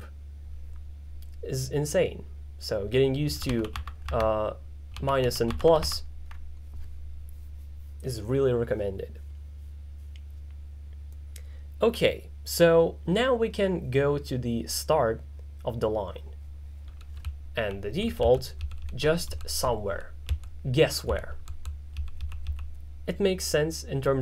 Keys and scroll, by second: 3.6 shift+-, 3.8 shift+=, 5.0 shift+-, 5.5 shift+=, 17.0-22.5 typing.